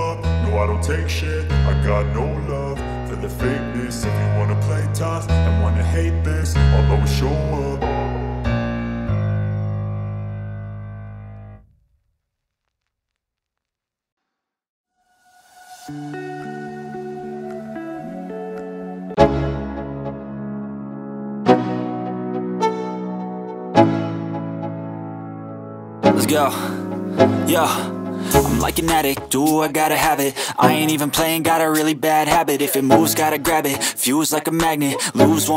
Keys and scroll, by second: 1.1 space, 12.4 space, 17.0 F4, 22.1 shift+F2, 23.2 F3, 23.5 Escape, 30.8 Escape, 34.3 F4.